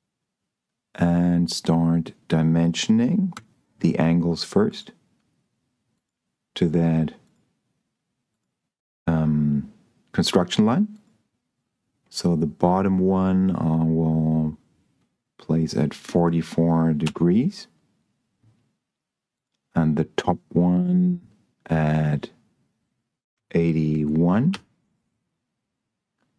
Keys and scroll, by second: 3.6 d, 16.3 4, 17.0 Return, 23.6 8, 23.9 1, 24.4 Return.